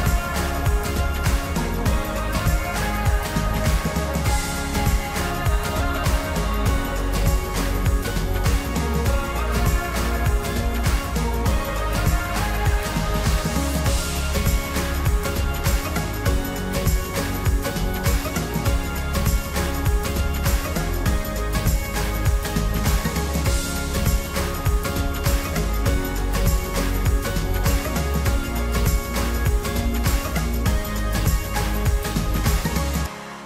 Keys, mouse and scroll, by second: 0.7-2.9 drag, 2.9 middle drag, 3.2-3.7 scroll down 1, 3.7 scroll down 1, 3.8 click, 4.7-5.7 middle drag, 5.7 click, 7.2-8.2 middle drag, 15.9-18.9 middle drag, 29.0-33.4 middle drag.